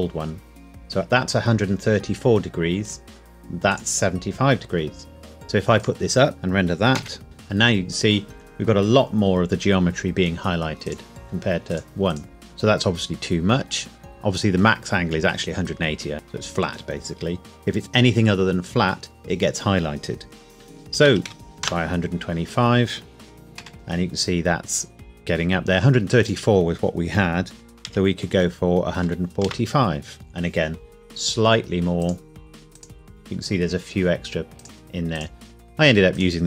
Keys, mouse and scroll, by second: 2.8 click, 6.3 KP_Enter, 7.0 F12, 10.8 click, 16.1 click, 20.9 KP_1, 21.0 KP_2, 21.3 KP_5, 21.6 KP_Enter, 23.6 F12, 26.2 click, 27.9 KP_1, 28.9 KP_4, 29.0 KP_5, 29.4 KP_Enter, 32.0 click.